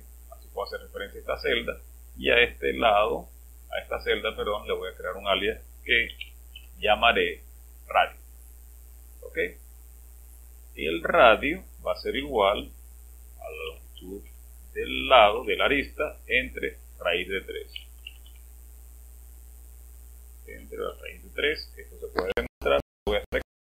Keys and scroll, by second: 5.7-7.5 typing, 12.2 typing, 13.3-15.4 typing, 17.5-18.7 typing, 20.4-20.8 typing, 22.2 typing.